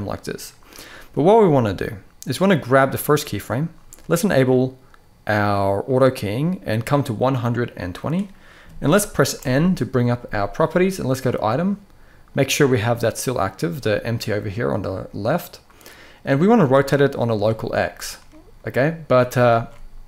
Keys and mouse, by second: 2.3 click, 6.3-7.7 drag, 9.1 n, 10.9 click, 16.3 click, 19.2 ctrl+z.